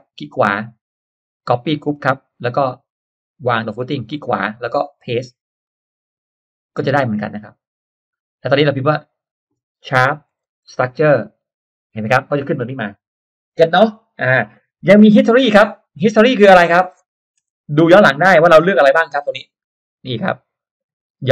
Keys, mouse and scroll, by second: 2.0 click, 3.4 click, 3.8 right click, 5.6 click, 6.6 click, 8.3-9.4 drag, 10.2 shift+3, 10.6 s, 11.7 t, 14.9 click, 16.5 click, 17.4 BackSpace, 20.2 click, 20.8 click.